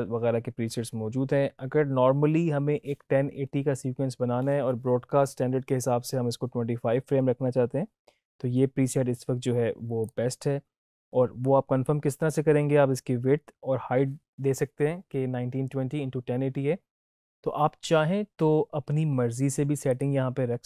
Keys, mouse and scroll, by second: 19.8 click.